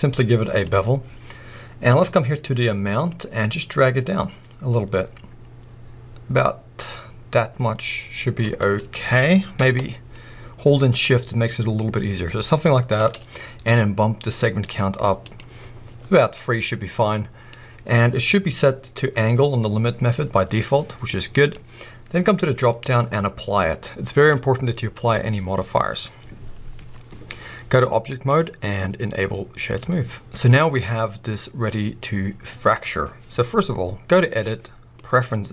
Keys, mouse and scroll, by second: 16.4-22.2 middle drag, 22.2-30.2 drag, 30.2-34.1 middle drag, 30.7-31.8 scroll up 2, 31.8-34.1 scroll up 1, 34.1-35.5 drag.